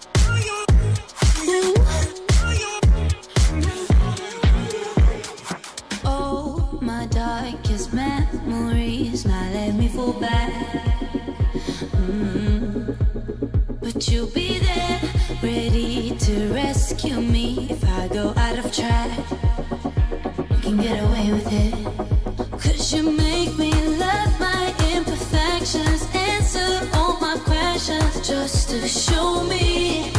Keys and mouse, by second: 0.5 middle click, 0.7 r, 2.5 r, 3.9 middle click, 5.4 click, 5.4-30.1 right drag, 5.8 r, 6.9 r, 7.0 x, 7.4 r, 8.4 click, 8.6 r, 10.3 click, 10.6 r, 12.0 r, 12.9 click, 13.1 r, 14.3 click, 14.9 r, 15.6 click, 15.9 r, 18.0 click, 18.9 r, 21.5 a, 24.4 click, 25.8 click, 26.5 r, 27.6 ctrl+z, 28.2 r, 29.1 ctrl+z, 29.4 click, 29.7 r.